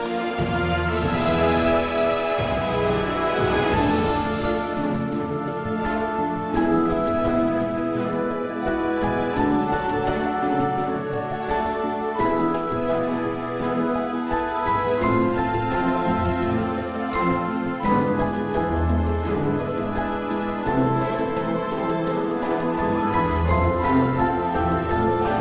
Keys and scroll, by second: 3.1 g, 6.2 g, 14.2 g, 16.3 g, 21.2 g, 22.4 g.